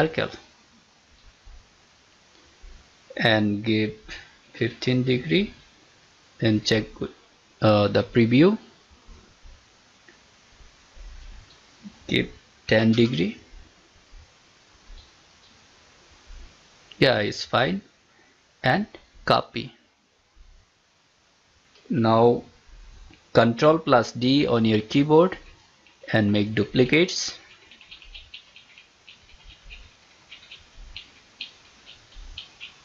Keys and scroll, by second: 23.7 ctrl+d.